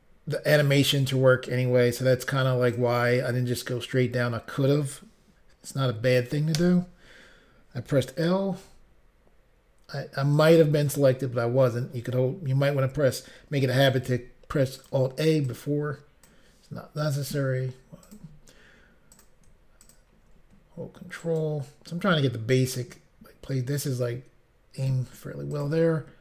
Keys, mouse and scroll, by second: 2.8 click, 10.4 click, 10.5 click, 14.8 click, 14.8 s, 14.9 click, 16.2 click, 16.3 click, 16.4 click, 18.1 click, 19.2 click, 19.9 shift+click, 21.3 shift+click, 21.3 ctrl+right click, 24.8 click, 25.0 click, 25.6 shift+click, 25.7 shift+click.